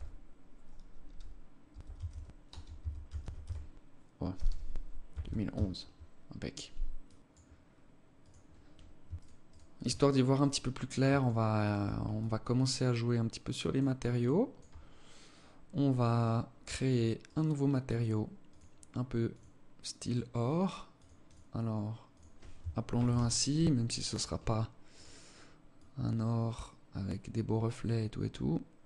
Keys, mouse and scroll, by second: 0.5-4.8 typing, 5.0 Tab, 8.6 shift+right click, 8.9 shift+right click, 9.8 right click, 10.6 shift+right click, 11.0 right click, 11.6 alt+click, 13.4 alt+click, 14.3-14.8 scroll up 2, 14.8 scroll up 1, 15.6 right click, 16.6 right click, 17.8 click, 18.8 click, 20.8 click, 21.5 click, 24.3 click.